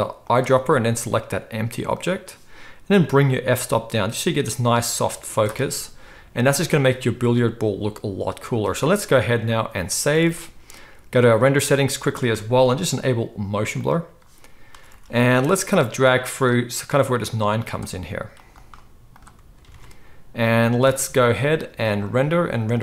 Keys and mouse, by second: 0.2 click, 0.3-3.0 middle drag, 3.0-11.4 drag, 8.8 z, 9.9 ctrl+s, 10.1 ctrl+s, 10.2 ctrl+s, 11.4-13.7 middle drag, 13.7 click, 14.0-15.7 middle drag, 14.8 ctrl+s, 14.9 ctrl+s, 15.7-18.4 drag, 18.4 middle click, 18.5-22.7 right drag, 19.7 alt+a, 22.1 click, 22.1 middle click.